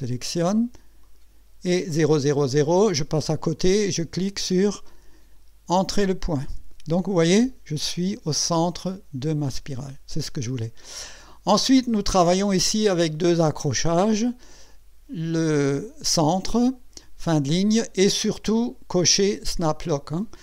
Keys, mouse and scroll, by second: 1.0 click, 6.0 click.